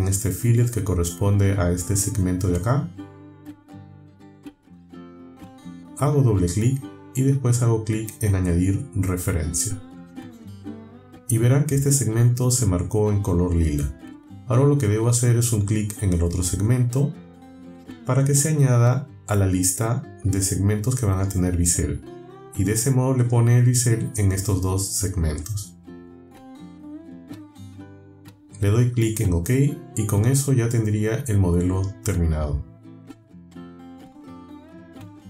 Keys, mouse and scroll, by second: 0.8 click, 3.7-4.0 alt+scroll up 2, 4.3-4.7 alt+scroll down 2, 5.7 click, 10.0 click, 12.3 alt+scroll up 2, 12.6 alt+middle click, 13.0 alt+scroll up 2, 14.6-15.6 alt+scroll down 3, 20.5 click, 27.9 click, 28.6 click, 29.6 click, 30.6 scroll down 1, 31.3-32.3 drag, 32.9-33.3 shift+drag, 33.3-33.7 shift+drag, 33.8-34.6 drag.